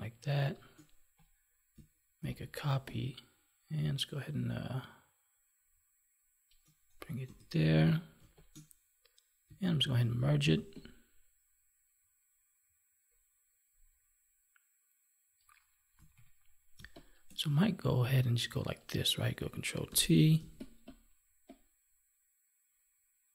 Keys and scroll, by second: 2.2 ctrl+j, 9.7 ctrl+e, 16.1 ctrl+=, 16.7 space, 19.8 ctrl+t.